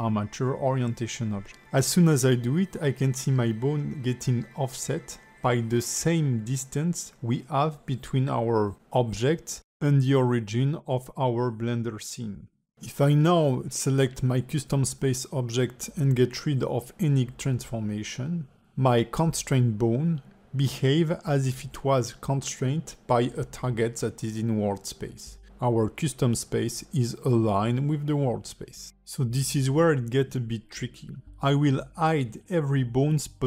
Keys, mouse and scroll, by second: 5.9 middle click, 6.6-6.9 scroll down 3, 6.9 middle click, 7.3 shift+middle click, 8.9 middle click, 10.6 middle click, 11.6 click, 12.3 ctrl+Tab, 12.5 click, 13.7 d, 13.9 click, 14.7-15.0 d, 15.3 click, 15.6 d, 15.7 d, 16.8 d, 16.9 click, 18.1 click, 18.8 click, 19.2 middle click, 20.0 alt+g, 20.9 click, 21.2-21.6 scroll up 3, 21.6 alt+middle click, 22.3 click, 23.0 ctrl+Tab, 23.2 click, 23.7 middle click, 24.3 g, 25.9 alt+middle click, 26.6 g, 30.4 click, 30.9 middle click, 31.3 ctrl+Tab, 31.6 click, 32.4 click, 32.8 ctrl+Tab, 33.3 click.